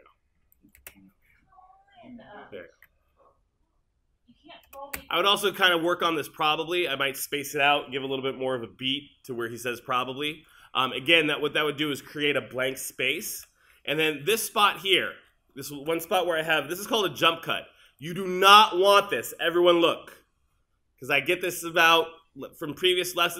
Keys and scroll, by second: 0.8 space, 5.0 space.